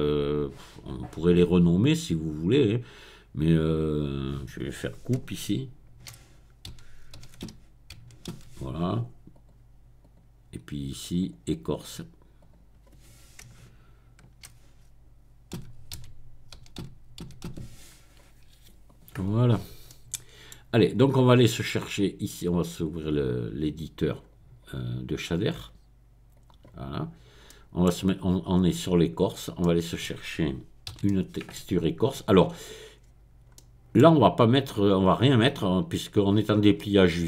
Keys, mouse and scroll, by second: 3.7 click, 5.4-8.3 typing, 9.3 click, 10.0 click, 11.0 click, 12.4 click, 13.6-14.1 BackSpace, 15.5-17.6 typing, 18.8 click, 19.2-20.7 middle drag, 20.7-22.0 scroll up 1, 22.0-23.1 scroll up 1, 23.1-24.5 drag, 25.4 click, 26.3 click, 27.0-27.8 scroll down 1, 28.4 click, 29.2-30.0 scroll up 2, 30.0 middle click, 30.9 n, 31.1 middle click, 32.3 middle click, 33.0-33.5 scroll up 2, 33.8-37.2 middle drag.